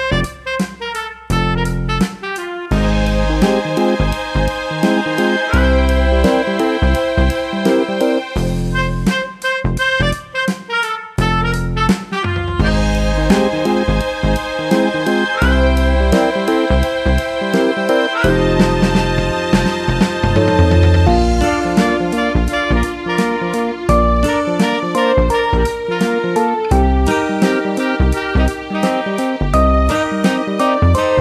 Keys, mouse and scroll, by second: 6.2 click, 8.4 click, 11.9 ctrl+d, 14.5 click, 20.3 click, 21.4 click, 26.1 click, 29.9 click.